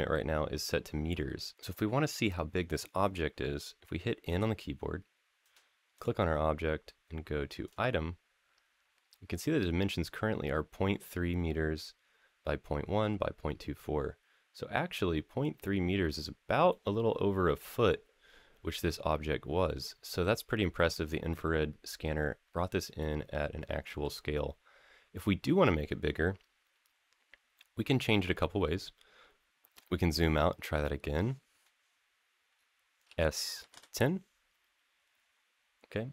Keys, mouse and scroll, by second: 1.5 click, 4.1 n, 5.7 click, 7.4 click, 16.5-20.0 middle drag, 20.2 scroll down 2, 20.7-21.1 scroll up 1, 21.1-22.6 middle drag, 22.8-23.8 middle drag, 24.3 scroll down 2, 24.5 scroll up 2, 25.9 scroll down 3, 26.2-27.2 scroll up 2, 29.8 shift+middle click, 29.8-30.9 scroll up 4, 31.8-32.5 scroll down 6, 32.8 s, 33.4 1, 33.5 0, 36.0 click.